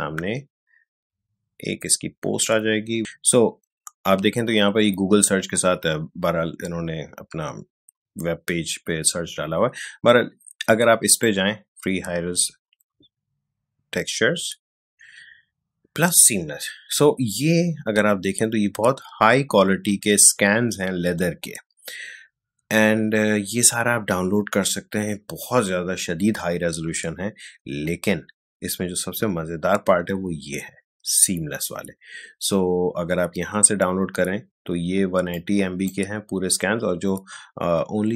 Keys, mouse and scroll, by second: 3.1 scroll down 2, 11.1 click, 13.9 scroll down 2, 16.1 scroll down 1, 24.0 scroll down 2, 31.5 scroll down 2, 35.3-38.1 drag.